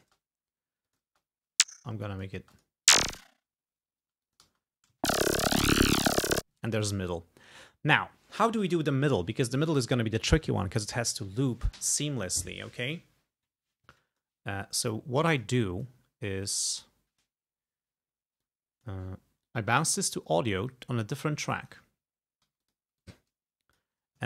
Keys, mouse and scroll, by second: 0.1 space, 0.9 click, 1.1 space, 1.9 click, 2.5 space, 2.6 click, 3.2-3.5 scroll up 2, 4.1 space, 4.3 click, 5.9 g, 6.6 space, 6.8 click, 15.5 click, 16.6 click, 18.5 click, 19.5 click, 20.8-21.9 drag, 22.0 scroll down 2, 22.5 g, 22.7 click, 23.0 click.